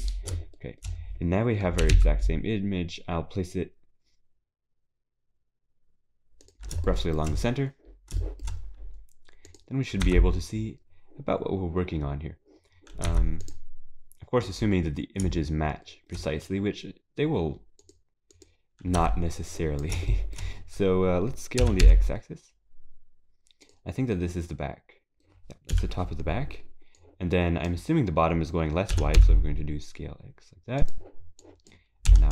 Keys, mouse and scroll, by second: 0.6 shift+middle click, 0.9-1.8 scroll up 6, 1.8 g, 6.9 shift+middle click, 7.4-8.1 scroll down 5, 8.2 shift+middle click, 8.5-9.5 scroll up 5, 9.5 click, 10.0 Tab, 10.8-11.2 scroll up 3, 12.6-13.1 scroll down 6, 13.1 Tab, 13.4 click, 13.8 scroll down 2, 15.8 shift+middle click, 16.3-16.9 scroll up 6, 17.8 click, 18.3 click, 19.0 Tab, 19.5 click, 20.1 shift+middle click, 20.6 scroll up 4, 21.6 s, 23.9 scroll down 3, 24.1 middle click, 25.7 KP_7, 27.0 click, 28.9 s, 31.4 click, 32.1 s.